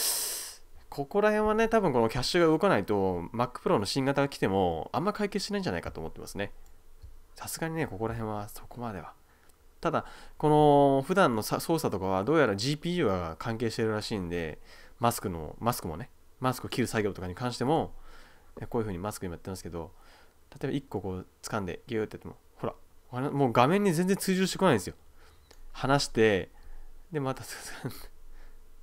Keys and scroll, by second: 6.1 space.